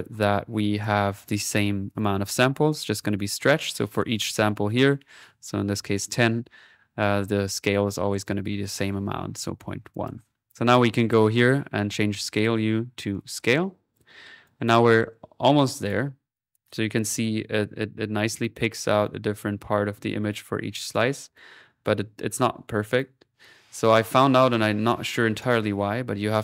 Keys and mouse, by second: 0.6-2.5 drag, 2.5-3.6 middle drag, 9.9-11.3 drag, 12.4-13.9 drag, 14.1 middle click, 14.4 click, 15.7 click, 16.1 middle click, 16.3 click, 17.9 middle click, 22.8 click, 23.9 click, 25.4-26.4 drag.